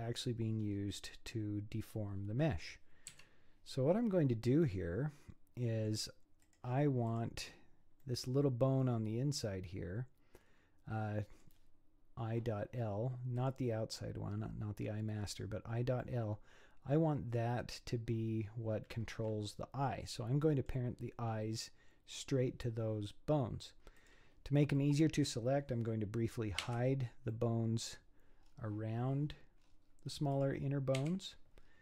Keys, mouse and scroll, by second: 0.6-3.1 scroll up 6, 3.2 z, 4.0-4.4 scroll up 6, 4.7-6.4 middle drag, 6.4 click, 7.1 click, 8.0-11.1 middle drag, 13.4 click, 15.2 scroll down 1, 15.3 click, 16.1-19.0 middle drag, 24.0 click, 24.8 middle click, 26.6 h, 27.3-28.3 middle drag, 28.3 scroll down 7, 29.1-29.8 scroll up 13, 30.3 click, 31.0 h, 31.6-31.8 scroll down 12.